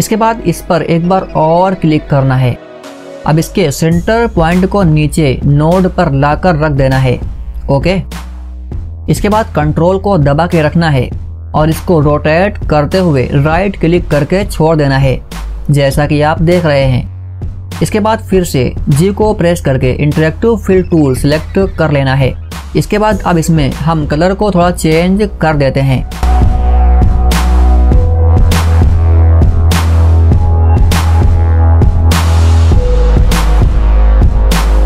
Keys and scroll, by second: 19.2 g.